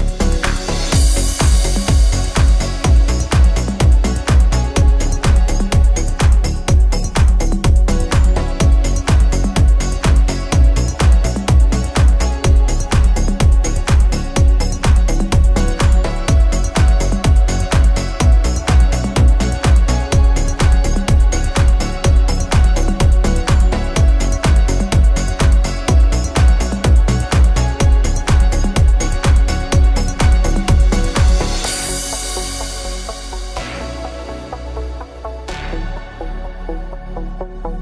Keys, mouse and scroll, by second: 7.6 space, 8.0 click, 15.7 space, 16.2-25.7 drag, 25.7 right click, 26.8 click, 30.8-34.8 drag, 34.8 right click, 35.3-37.8 drag.